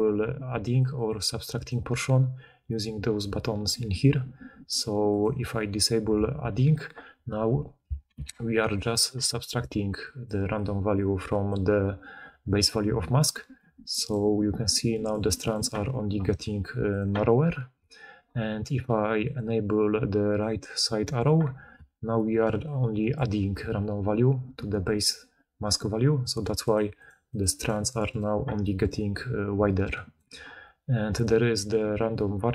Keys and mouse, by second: 0.4-5.1 drag, 0.4-9.2 middle drag, 0.4-8.7 right drag, 0.4-1.8 d, 8.0 d, 9.1-10.3 d, 9.2-11.4 right drag, 9.9-11.4 drag, 9.9-11.4 middle drag, 11.4 d, 11.5 d, 14.0-28.0 right drag, 14.8 click, 14.8 middle click, 15.3 click, 15.3 middle click, 16.8 click, 16.8 middle click, 17.7 d, 18.0 d, 18.1 d, 19.1 click, 20.2 click, 21.6-22.5 d, 22.5-26.7 drag, 23.1 d, 23.2 d, 26.9 click, 27.2 click, 27.5 click, 27.7 click, 28.0 click, 28.1-29.5 drag, 29.5-32.5 right drag, 29.5 d, 30.1 d, 31.0 click.